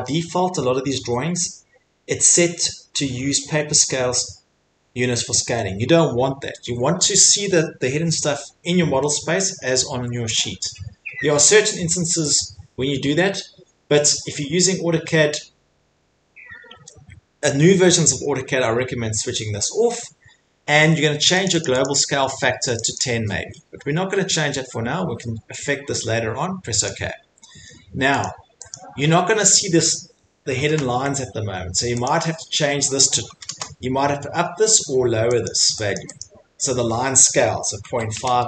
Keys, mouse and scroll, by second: 19.8-21.6 drag, 22.7 click, 22.9 click, 26.8 click, 28.7 click, 29.1-29.6 scroll, 30.2 scroll, 30.5 middle click, 30.7 ctrl+1, 32.1 click, 33.2 typing, 33.5 Return, 35.5 click, 35.9 click, 36.2 click, 38.1 5.